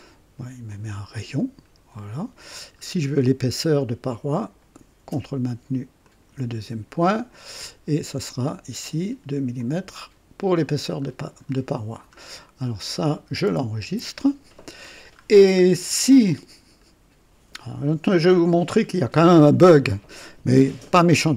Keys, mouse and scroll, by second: 0.6-2.6 drag, 2.8 scroll up 1, 4.3 click, 6.0 ctrl+click, 8.0 click, 9.5-10.7 drag, 10.9-11.6 scroll down 2, 12.1-12.9 middle drag, 13.8 ctrl+s, 15.2-15.6 scroll down 1, 15.8 scroll down 1, 16.8-21.3 middle drag.